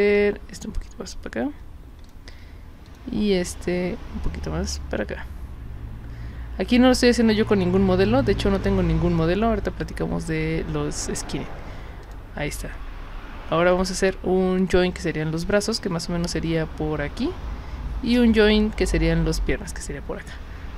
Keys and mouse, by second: 2.1 drag, 2.9 click, 12.0 click.